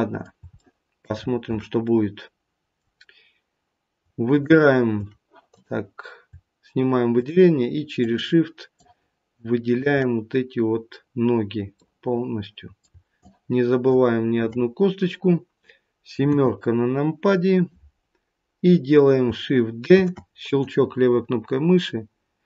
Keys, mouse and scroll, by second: 0.5 shift+middle click, 1.1-1.8 scroll up 3, 1.8 middle click, 4.2 shift+click, 5.5 click, 7.0 shift+click, 11.8 middle click, 13.1 shift+click, 17.3-19.1 scroll down 1, 19.1 scroll down 1, 19.9 shift+d.